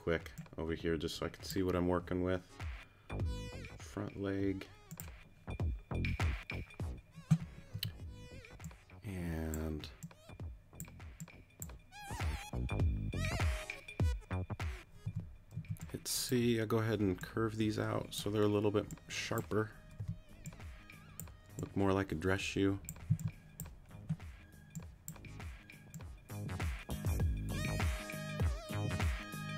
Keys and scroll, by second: 7.7 t, 15.0 t, 15.5 c, 20.0 t, 23.1 c.